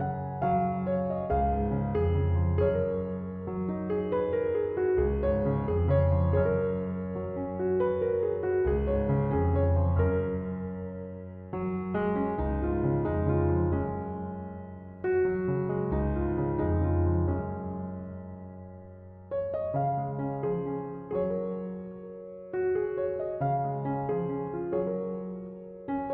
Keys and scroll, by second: 18.4 typing.